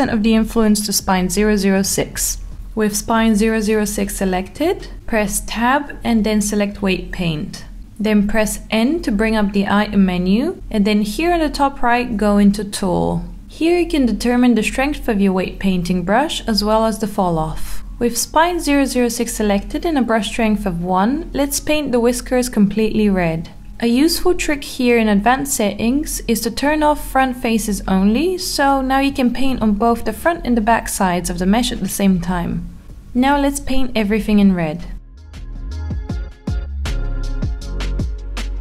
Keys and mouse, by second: 3.6 Tab, 10.1 click, 16.8-18.1 drag, 20.2 click, 24.2 click, 26.9 click, 28.5 click, 29.2 click, 30.2 click, 30.6 click, 31.0 click, 31.3 click, 31.7 click, 33.3 click, 33.9 alt+middle click, 35.3 click, 35.5 click, 35.9 click, 36.8 alt+middle click, 37.7 click, 38.1 click.